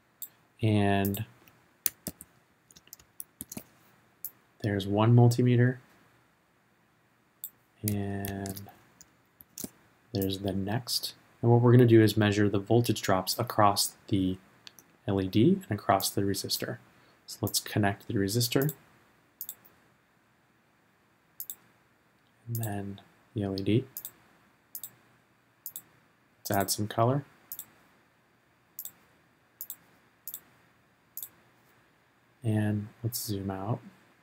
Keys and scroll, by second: 2.0 super+c, 3.4 super+v, 8.3 super+c, 9.4 super+v.